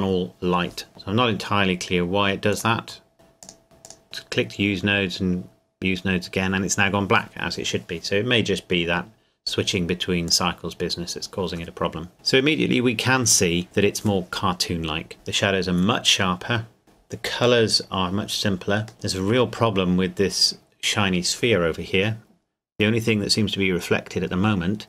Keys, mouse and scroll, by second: 0.9-1.2 scroll down 1, 2.5 click, 10.3 click, 18.9 middle click.